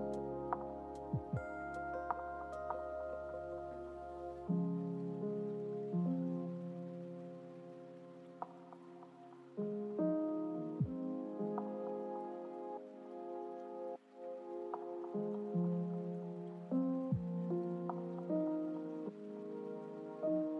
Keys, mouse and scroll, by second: 2.2 click, 3.2-11.2 drag.